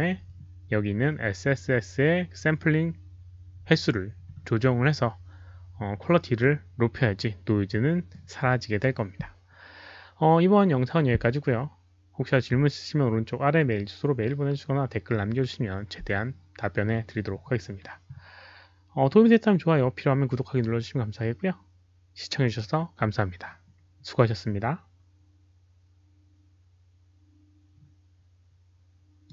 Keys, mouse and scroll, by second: 29.2 click.